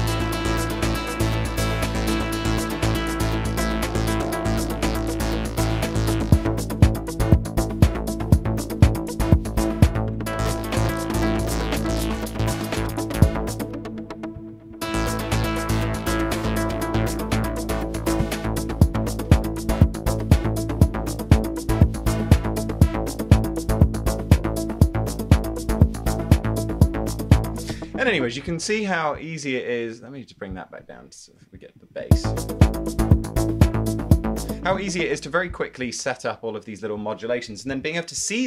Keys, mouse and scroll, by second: 10.1 space, 10.2 space, 32.2 space, 34.7 space.